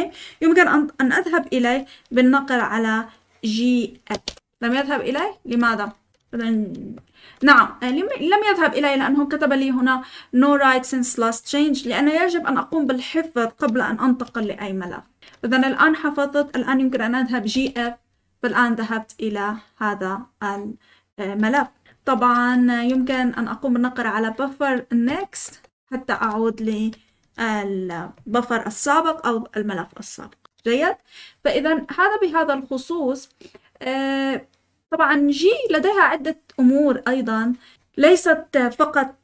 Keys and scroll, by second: 3.8-6.1 typing, 7.3 Escape, 14.6-15.3 typing, 17.2-18.1 typing, 22.6-23.4 typing, 25.0-27.3 typing, 25.4 Return, 26.1 Escape.